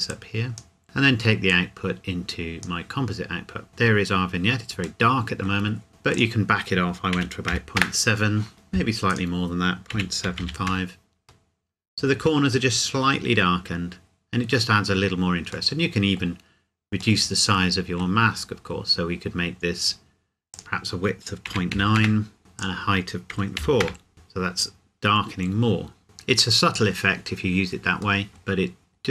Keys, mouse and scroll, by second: 5.0 middle click, 5.8 scroll up 1, 5.9 scroll down 1, 6.1 click, 7.1 KP_Decimal, 7.5 KP_7, 7.8 KP_Enter, 9.1 click, 9.9 KP_Decimal, 10.3 KP_7, 10.4 KP_5, 10.7 KP_Enter, 15.7 middle click, 17.5 middle click, 18.3-20.5 scroll up 1, 21.5 KP_Decimal, 21.7 KP_9, 22.0 KP_Enter, 22.6 click, 23.3 KP_Decimal, 23.6 KP_4, 23.8 KP_Enter, 28.2 middle click, 28.6-29.1 scroll down 1.